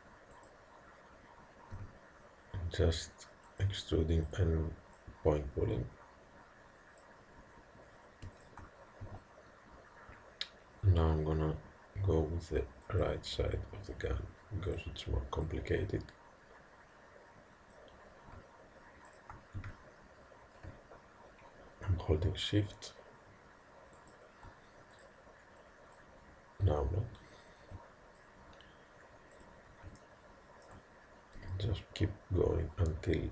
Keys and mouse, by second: 1.8 e, 4.4-6.8 drag, 8.4 click, 9.1 e, 14.7-17.3 drag, 19.1 click, 19.7 e, 25.0-27.8 drag, 29.4 click, 30.1-31.6 middle drag, 31.4 e.